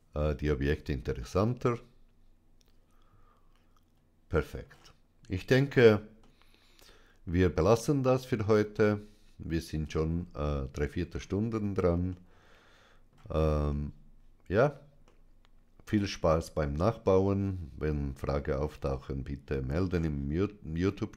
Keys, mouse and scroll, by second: 3.8 middle click, 4.5-5.3 scroll up 2, 6.0-7.5 middle drag, 7.9-8.5 scroll down 2, 8.6-9.7 middle drag, 11.9-13.1 middle drag, 13.5-14.7 shift+middle drag, 14.9-16.1 shift+middle drag, 18.7-19.9 middle drag.